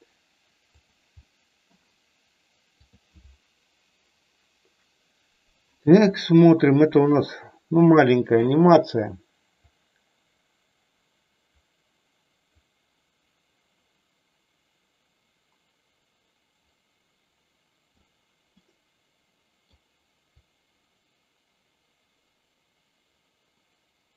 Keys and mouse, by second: 0.7 click, 1.2 middle click, 2.8 click, 7.7 middle click, 9.6-17.9 drag, 18.6-19.7 middle drag, 20.3-24.1 drag.